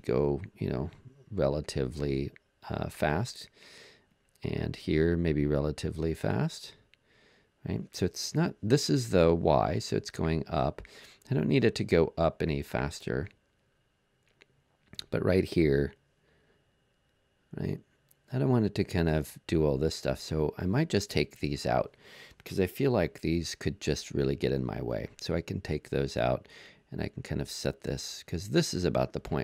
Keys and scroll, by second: 23.4 BackSpace, 24.7 BackSpace.